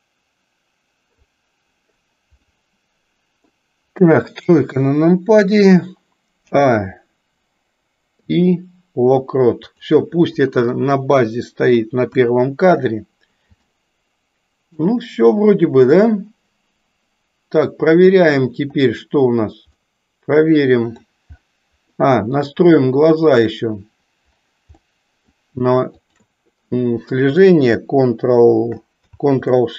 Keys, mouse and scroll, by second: 2.5-3.6 middle drag, 4.4 KP_3, 6.4 a, 8.1 i, 10.7-11.8 middle drag, 12.2 KP_1, 13.7-14.8 shift+middle drag, 19.8-21.1 middle drag, 21.8 middle click, 23.1 click, 24.8 middle click, 25.9 shift+click.